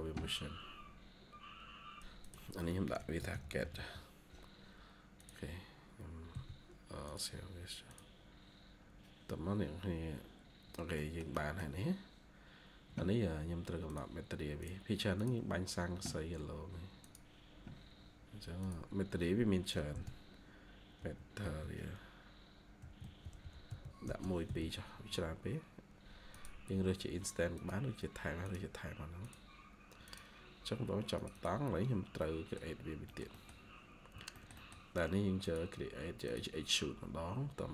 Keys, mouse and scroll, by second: 2.9-4.0 typing, 6.0-6.7 typing, 10.9 middle click, 11.6-12.6 scroll down 1, 12.7-13.7 scroll down 1, 19.8 typing, 21.1-21.8 typing, 31.2 double click, 32.1 middle click, 33.4 scroll down 1, 33.7-34.2 scroll up 1, 34.2 middle click.